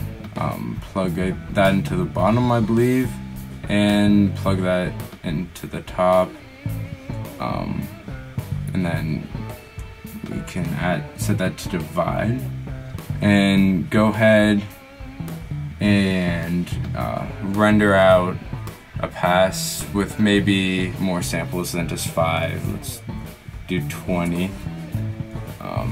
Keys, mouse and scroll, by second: 2.1 click.